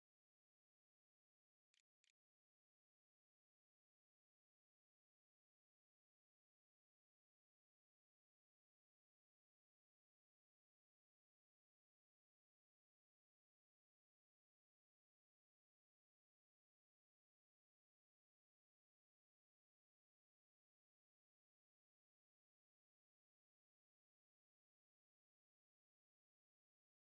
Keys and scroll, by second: 0.3-3.0 typing, 1.8 Return.